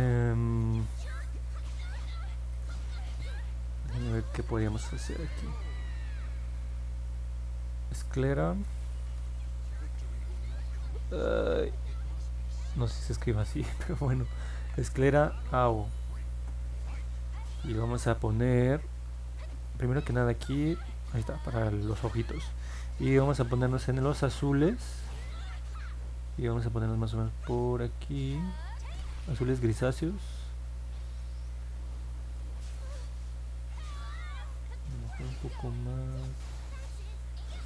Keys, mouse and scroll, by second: 8.9-10.7 typing, 14.1-15.4 typing, 16.3 Return, 26.6-32.3 drag.